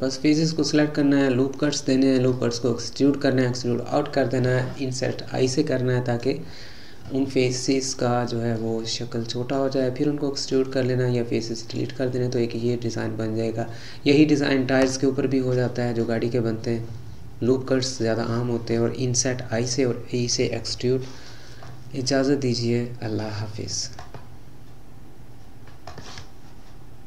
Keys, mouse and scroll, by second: 0.8-1.5 scroll down 2, 1.5-2.3 scroll down 2, 2.3-5.5 middle drag, 6.5-8.1 scroll up 4, 8.1-8.7 scroll up 2, 8.7-10.2 middle drag, 10.2-10.8 scroll up 3, 10.8-12.5 middle drag, 12.5-13.3 scroll up 3, 13.3-13.8 scroll down 6, 14.8 scroll down 2, 15.7-16.5 middle drag, 16.5-16.8 scroll down 2, 16.8-22.4 middle drag, 22.4-25.5 scroll down 2.